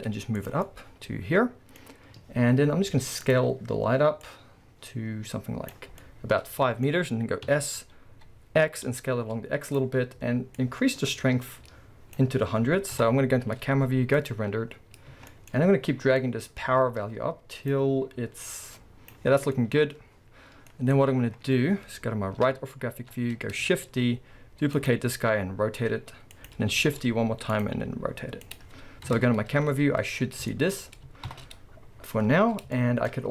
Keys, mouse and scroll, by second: 0.5 click, 0.7-1.8 middle drag, 1.8-2.6 scroll, 2.6-3.2 middle drag, 3.2 click, 4.2-6.0 drag, 6.0-9.8 middle drag, 7.5 s, 9.8 click, 10.6-15.6 drag, 13.6 z, 14.7-15.2 scroll, 15.6 middle click, 15.6-16.2 scroll, 16.2-20.8 drag, 20.6-21.3 scroll, 20.8-24.9 middle drag, 23.1-23.9 scroll, 23.9 shift+d, 24.9-26.3 drag, 25.3 r, 27.6 click, 27.8 r, 29.8-30.2 scroll, 30.5-33.3 shift+middle drag, 31.4 shift+Left, 32.0-32.8 scroll up 2.